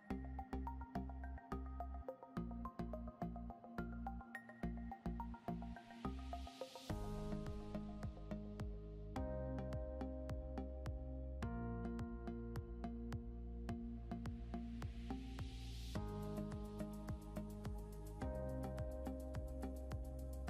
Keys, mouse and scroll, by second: 3.2 scroll up 1, 8.1 scroll up 1, 13.6 scroll down 1.